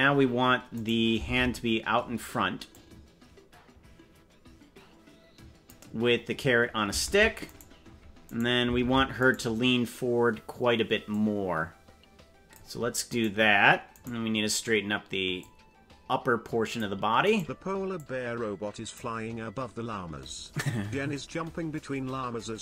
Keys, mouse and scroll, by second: 0.8 right click, 1.4 ctrl+Tab, 2.7-5.7 drag, 7.0 ctrl+Tab, 7.6 right click, 8.4 right click, 8.8 ctrl+Tab, 9.4 right click, 11.1-12.5 drag, 13.2 right click, 14.0 right click, 15.3-16.8 drag, 17.4 right click, 17.9-18.9 drag.